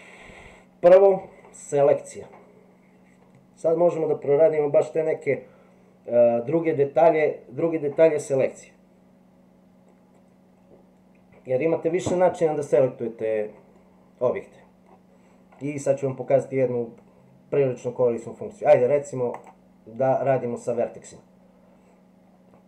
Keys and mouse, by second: 13.7-14.8 middle drag, 19.3 click.